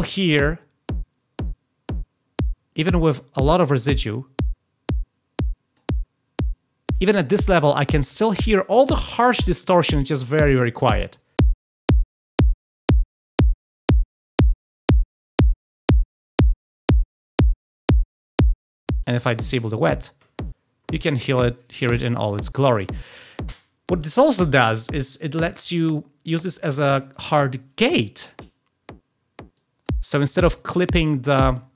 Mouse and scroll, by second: 3.2-5.7 drag, 13.9 click, 16.5 click, 16.7 click, 18.9-19.5 drag, 25.1-27.1 drag, 29.5 drag, 31.2 drag.